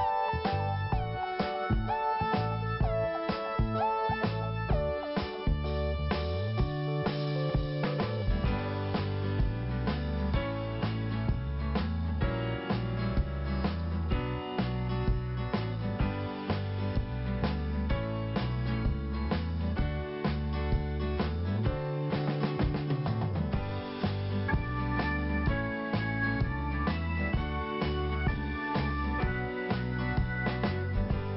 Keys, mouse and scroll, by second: 0.6 click, 1.4 scroll down 1, 3.0 t, 3.5 scroll down 2, 4.5 scroll up 2, 5.3 click, 7.8 click, 8.4 p, 8.7 scroll down 1, 9.7 click, 10.7-11.2 scroll down 1, 11.7 scroll up 1, 12.8 click, 14.0 scroll down 1, 15.2 scroll up 1, 16.1 click, 17.6 scroll down 1, 18.3 scroll up 1, 20.3 click, 20.4 click, 21.2 click, 21.3 click, 22.6 click, 22.7 click, 23.0 click, 23.1 double click, 23.8 double click, 25.1 click, 26.5 click, 29.2 p, 30.7 click.